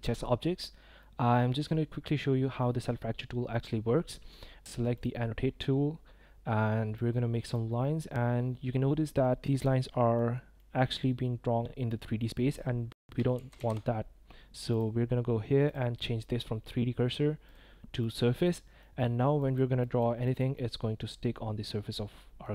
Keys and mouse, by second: 1.1 middle click, 1.3-2.5 drag, 5.6 click, 7.3 click, 8.0 click, 8.3 middle click, 9.6 middle click, 10.3 click, 11.1 click, 11.9 middle click, 13.3 ctrl+z, 13.6 ctrl+z, 14.7 click, 15.7-16.6 drag, 17.4-18.0 drag, 18.4 middle click, 19.8 click, 20.2 click, 20.6-22.4 drag.